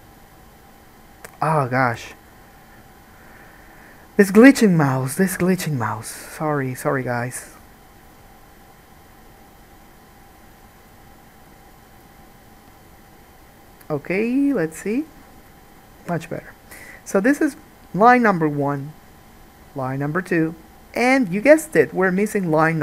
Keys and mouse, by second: 2.2 ctrl+z, 2.3-7.3 middle drag, 7.3-8.3 right drag, 8.3-9.6 middle drag, 9.6-13.8 right drag, 13.8-22.8 middle drag.